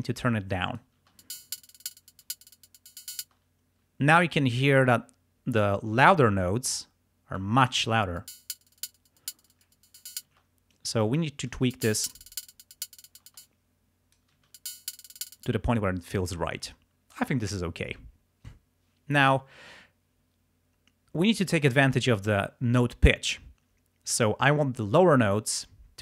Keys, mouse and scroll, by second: 1.1 space, 3.3 space, 7.4 click, 8.1 space, 10.3 space, 10.8 click, 11.6 space, 13.3 space, 13.5 click, 14.4 space, 15.4 space.